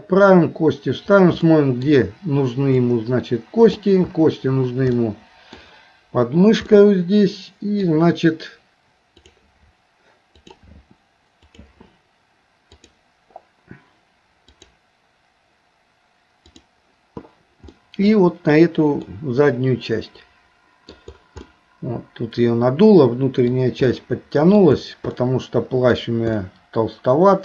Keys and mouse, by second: 1.5 shift+middle click, 2.8-5.0 drag, 5.0 middle click, 6.7-7.9 middle drag, 17.8 middle click, 19.1-21.0 middle drag, 21.5-23.5 middle drag, 23.9 middle click, 25.1 middle click, 26.4-27.4 middle drag.